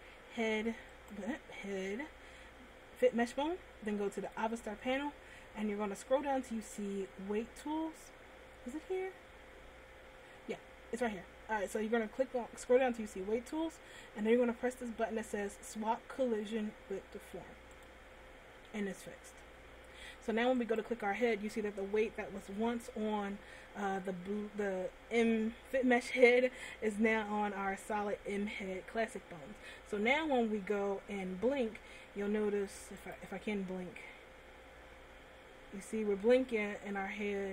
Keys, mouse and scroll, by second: 0.2 right click, 1.3 right click, 4.4 click, 17.9 click, 21.1 right click, 33.2 click.